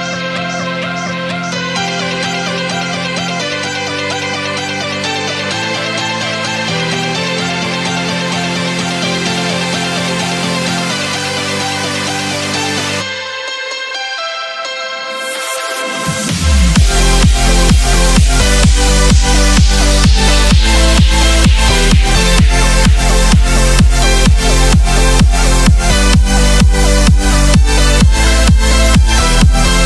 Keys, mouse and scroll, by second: 1.4-2.9 typing, 3.8 click, 4.9-7.6 typing, 8.2-9.3 drag, 11.2 F10, 11.8 click, 16.3 right click, 17.6 click, 19.6-22.1 typing, 22.9-27.3 drag, 27.4-29.2 typing, 29.3 Return.